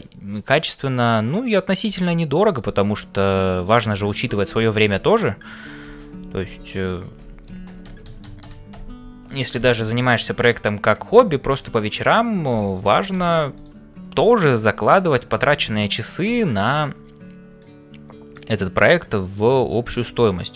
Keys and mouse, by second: 0.0-20.5 typing, 0.0 middle click, 1.2 middle click, 2.7-3.8 middle drag, 4.6 shift+middle click, 7.9-9.2 ctrl+KP_Add, 11.8 shift+click, 14.3 shift+click, 15.7 ctrl+s, 16.4 shift+click, 17.5 middle click.